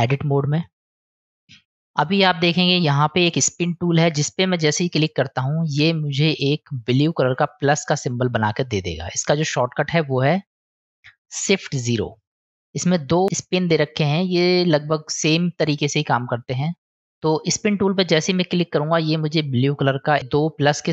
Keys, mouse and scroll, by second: 0.9 click, 3.5 click, 5.4-6.2 middle drag, 8.5-8.9 middle drag, 12.6 click, 19.0-19.5 middle drag.